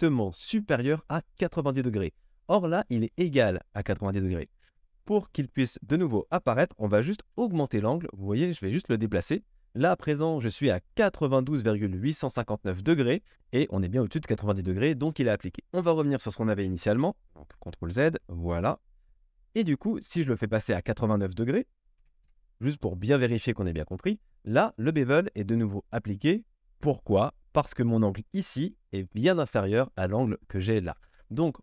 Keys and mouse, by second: 4.7 KP_1, 9.1-20.8 middle drag, 9.1 g, 17.6 ctrl+z, 19.0 KP_1, 20.8-31.6 drag.